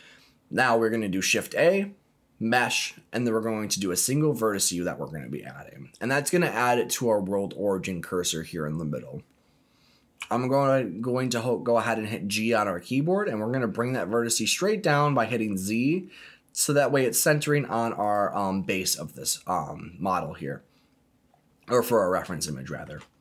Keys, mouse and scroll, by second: 10.2 g, 14.9 z, 18.0 click, 21.4-22.0 scroll up 3, 22.0-22.6 scroll down 2, 22.4 shift+middle click, 23.1-23.2 scroll up 2.